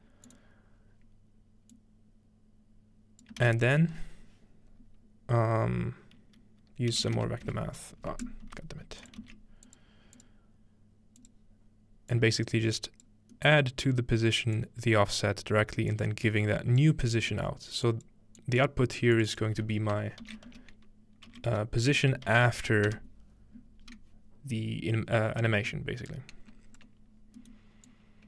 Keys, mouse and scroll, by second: 0.3 click, 1.7-3.3 drag, 3.4 shift+a, 3.7 click, 5.2 click, 6.9-9.7 typing, 8.0-9.2 scroll up 1, 8.2-9.8 drag, 10.2 click, 11.2 click, 12.1 click, 14.6-15.9 drag, 16.0-16.8 drag, 17.9 click, 18.4 click, 19.2 click, 19.4-21.2 drag, 20.2-22.8 typing, 26.1 click, 27.2 scroll down 1, 27.9 click.